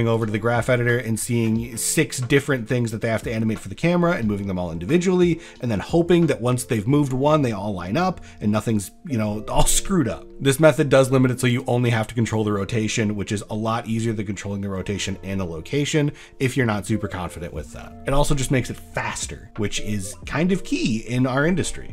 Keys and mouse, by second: 2.7 middle click, 10.1 ctrl+middle click, 10.3 n, 11.1-12.0 drag.